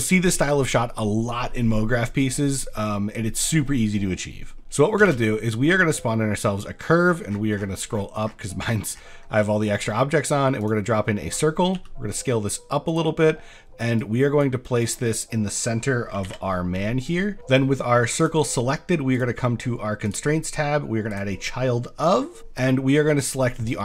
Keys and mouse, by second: 5.1 shift+a, 11.7 s, 13.3 click, 14.1 click, 16.1 KP_5, 16.2 KP_7, 17.2 shift+middle drag, 18.2 click, 19.1 click, 20.1-21.2 drag.